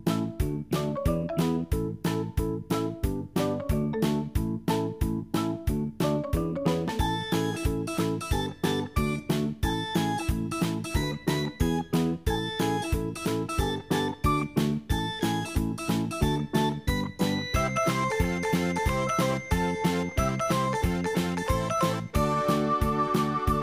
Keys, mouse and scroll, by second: 9.3-11.1 scroll down 2, 11.8 click, 15.3 click, 16.3-17.0 scroll down 2, 17.0-17.6 scroll up 2, 18.6 click, 21.6 click.